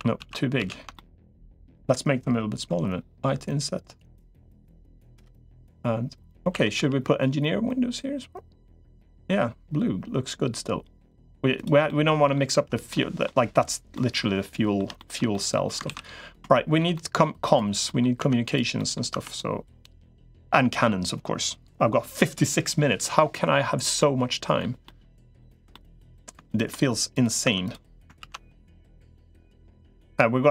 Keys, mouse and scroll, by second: 0.1 ctrl+z, 0.5 ctrl+z, 0.7 middle click, 1.5 middle click, 4.7-5.7 drag, 4.7-5.7 right drag, 6.3 a, 6.7 g, 11.7 middle click, 12.3 Tab, 12.7 middle click, 13.7 middle click, 14.8 middle click, 15.1 middle click, 15.7 ctrl+s, 16.3 shift+middle click, 16.7 middle click, 17.6 middle click, 18.1 Tab, 18.6 middle click, 18.9 Tab, 19.1 click, 19.8 middle click, 23.8 middle click, 24.6 middle click, 25.2 shift+middle click, 25.5 middle click, 26.3 shift+middle click, 26.9 click, 27.3 Tab, 28.1 ctrl+s, 28.9-30.5 middle drag.